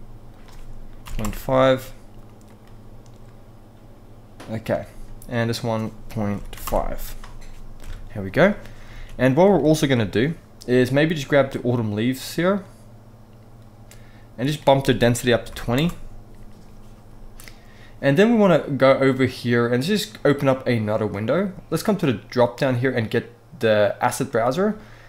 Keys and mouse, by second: 0.1 click, 2.2 click, 5.3-6.4 drag, 7.4 KP_0, 8.7 ctrl+s, 9.2 shift+click, 9.4 middle click, 14.2-15.5 drag, 19.8-21.1 drag, 21.5-23.9 drag.